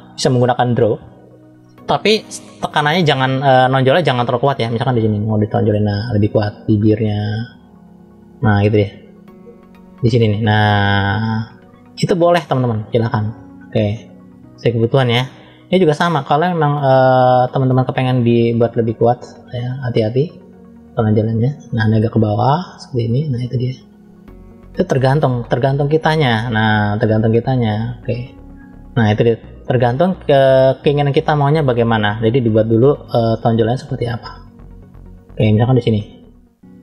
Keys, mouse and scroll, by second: 0.2 click, 4.8 click, 15.7 click, 29.0-29.5 scroll down 1, 29.5 middle click, 30.7 middle click, 31.7-32.0 scroll up 1, 33.1 middle click, 34.4 click.